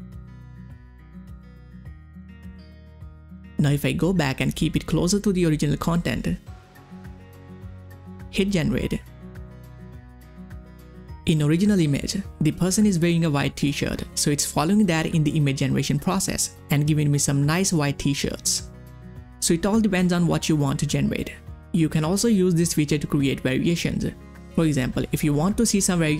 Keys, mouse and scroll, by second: 0.3 click, 0.3 click, 2.5 click, 2.5 click, 5.9 click, 5.9-7.7 drag, 9.0 click, 13.0 click, 13.0 click, 19.4 click, 19.4 click, 22.4 click, 22.4 click, 23.8 click.